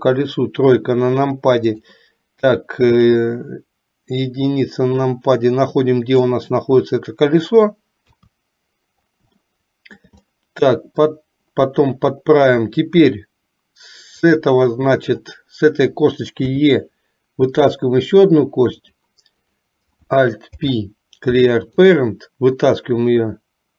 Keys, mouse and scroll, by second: 0.0 KP_1, 1.7 click, 3.2-6.4 drag, 8.1 KP_3, 9.6 middle click, 14.4 click, 16.6 e, 19.5 click, 20.6 alt+p, 22.9-23.7 drag.